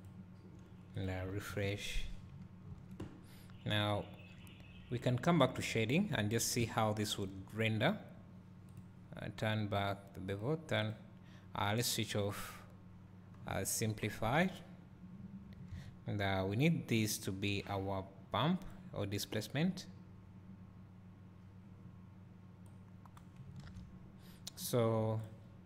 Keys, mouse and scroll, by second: 0.9 click, 1.6 alt+r, 3.5 scroll down 2, 5.7 drag, 6.3 scroll up 1, 8.6 click, 9.7 click, 10.3 click, 10.8 click, 12.3 click, 13.4-14.7 scroll down 3, 17.6-19.6 drag, 21.4-22.7 drag.